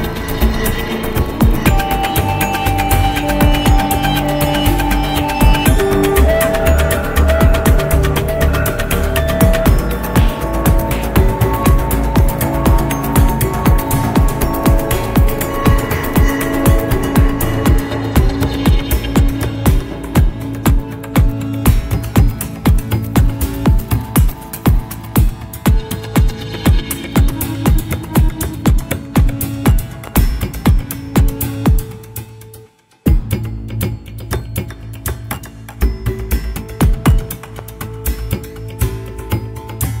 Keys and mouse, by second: 3.0-7.0 drag, 8.3 x, 11.6 middle click, 12.5 2, 13.5 click, 14.0 alt+click, 15.6 h, 17.2 ctrl+z, 17.8 middle click, 19.1 f, 19.7-23.0 middle drag, 23.8-25.4 middle drag, 28.8 click, 30.2-32.8 drag, 34.9 click, 36.2 click, 36.7 middle click, 38.0 middle click.